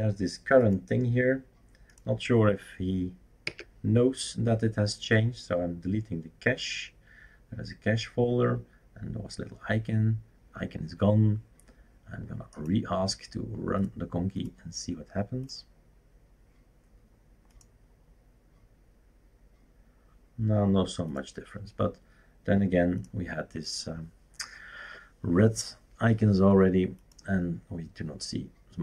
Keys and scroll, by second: 3.4 Delete.